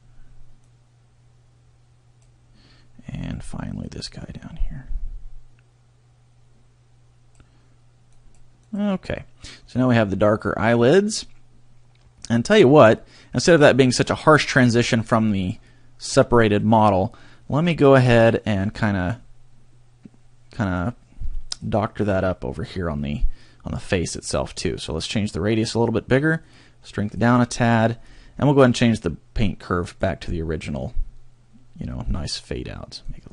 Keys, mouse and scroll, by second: 0.7 click, 4.0 click, 8.2 click, 8.7 click, 9.5 scroll down 1, 9.9 middle click, 12.7-13.1 scroll up 2, 13.6 middle click, 15.1-15.9 scroll up 1, 15.9 scroll up 1, 17.6 middle click, 18.7 middle click, 20.7 click, 25.0 click, 26.4 click, 28.0-29.5 scroll down 1, 29.8 click, 33.0 click.